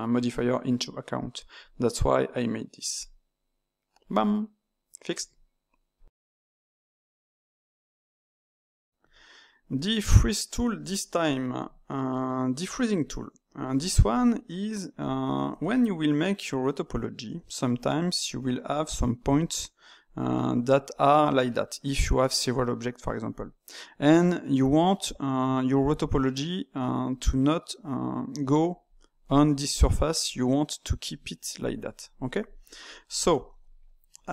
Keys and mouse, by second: 2.9-4.1 drag, 4.1-7.0 middle drag, 9.7 click, 9.9 Tab, 10.7-12.0 ctrl+shift+middle drag, 12.0 click, 12.9 click, 13.8-18.9 shift+middle drag, 18.9 d, 19.3 click, 20.0-23.3 d, 28.8 click, 29.6 d, 29.6 d, 30.2-31.6 drag, 31.6 d, 31.9-33.8 right drag, 33.8 d.